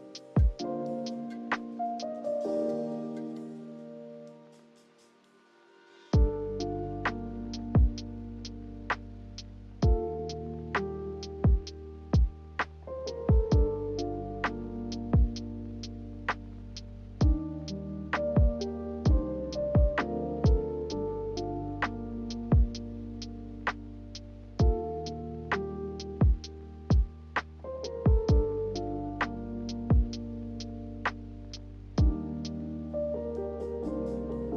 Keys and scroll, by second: 21.1 z, 24.5 Delete, 29.8 a.